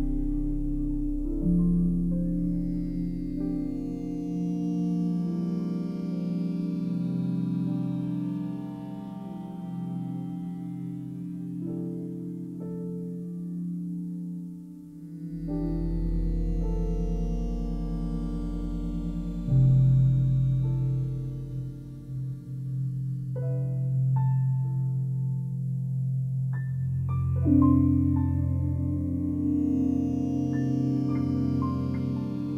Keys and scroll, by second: 6.1 Return, 12.0 8, 12.3 Return, 25.9 Return, 29.1 BackSpace, 29.6 6, 30.4 Return.